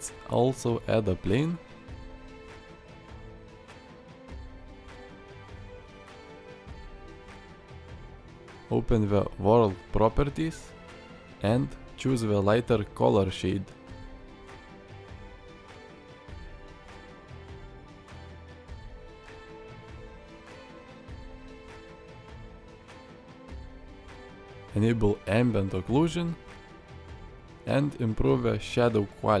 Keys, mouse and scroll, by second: 0.0 click, 0.6 shift+a, 3.4 s, 5.5 shift+middle click, 6.3 shift+middle click, 6.9 click, 9.9 click, 18.0 middle click, 18.7 click, 19.2 middle click, 19.7-20.2 shift+drag, 21.3 click, 22.1-23.1 drag, 24.6 click, 27.3 click, 28.2-29.4 drag.